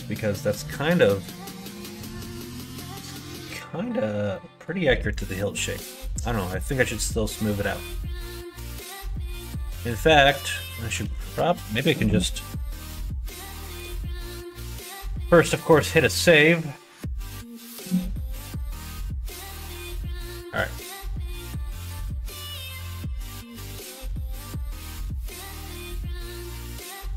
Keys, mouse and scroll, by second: 5.1 middle click, 5.5 middle click, 5.9 middle click, 6.3 middle click, 6.8 click, 7.1 middle click, 7.8 middle click, 8.3 middle click, 9.1 shift+middle click, 9.5 middle click, 13.2 middle click, 14.0 middle click, 14.4 ctrl+s, 19.9 middle click.